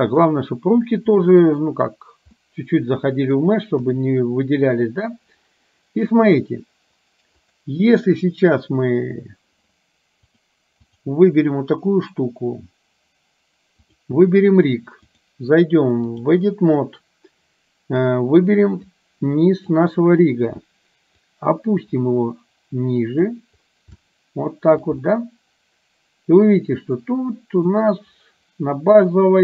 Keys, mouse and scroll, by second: 1.3 middle click, 2.4-3.4 middle drag, 3.9 KP_1, 7.5 click, 10.4-11.0 drag, 15.3-16.4 drag, 18.9-19.9 drag, 21.4-23.4 drag, 24.0 shift+middle click, 25.0-27.8 middle drag, 29.3-29.4 middle drag.